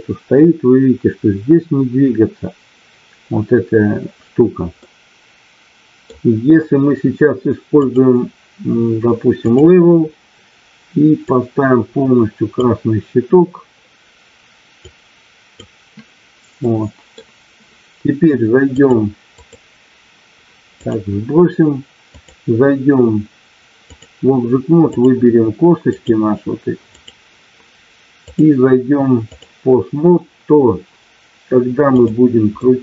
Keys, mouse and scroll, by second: 4.7-6.0 middle drag, 7.8-9.6 drag, 12.8-14.7 drag, 14.8-20.8 drag, 22.1-24.1 drag, 25.0 click, 26.9 click, 28.1-29.4 drag, 32.0 click, 32.6 middle click.